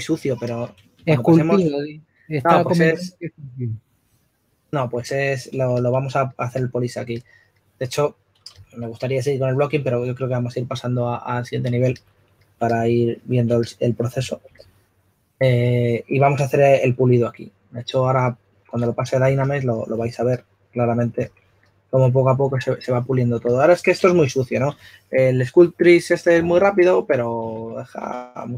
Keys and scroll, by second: 1.0-2.2 typing, 5.9 s, 8.7 s, 12.1 typing, 14.2-15.5 typing, 18.9 typing, 20.1-21.6 typing, 24.2 shift+f, 28.3 typing.